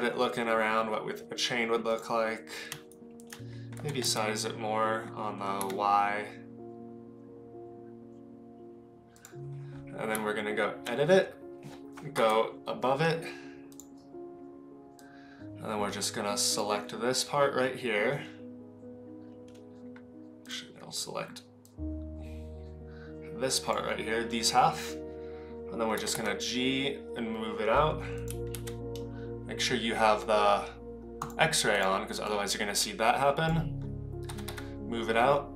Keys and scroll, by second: 3.7 s, 10.1 Tab, 12.2 KP_7, 25.9 g, 28.5 ctrl+z, 34.2 g.